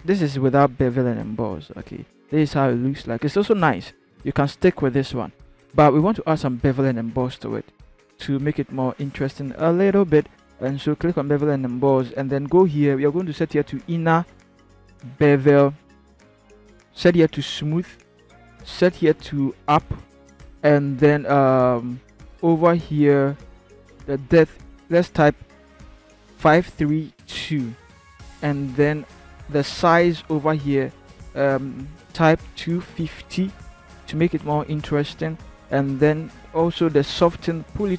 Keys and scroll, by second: 26.3 5, 26.7 3, 27.0 2, 32.5 2, 33.6-34.3 typing.